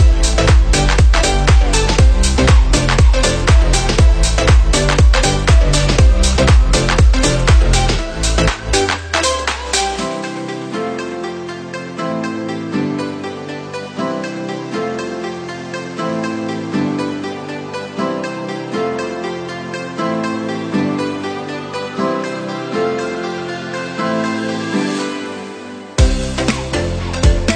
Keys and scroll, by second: 0.2 Down, 4.1 Up, 13.1 Down, 14.1 Right, 17.0 Down, 17.7 Right, 22.5 Down, 22.9 Right, 23.8 Down.